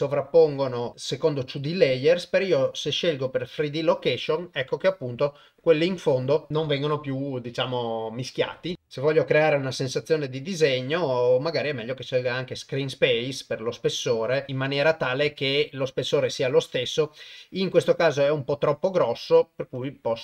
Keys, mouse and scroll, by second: 1.4-2.9 drag, 11.0-12.9 drag, 14.5 click, 19.8-20.2 drag.